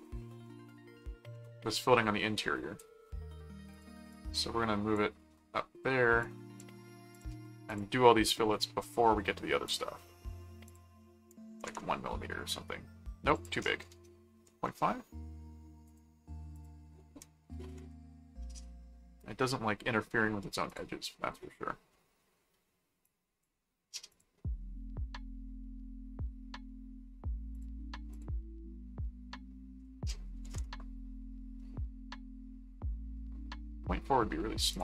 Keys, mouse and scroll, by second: 3.7 click, 6.2 click, 7.1 click, 8.8-10.0 middle drag, 10.6 click, 13.3 click, 15.8 click, 16.5 click, 18.7 middle click, 20.7 click, 21.9 middle click, 23.0 click, 24.1 click, 24.8-26.7 middle drag, 27.5 click, 28.1 click, 31.6 middle click, 34.7 click.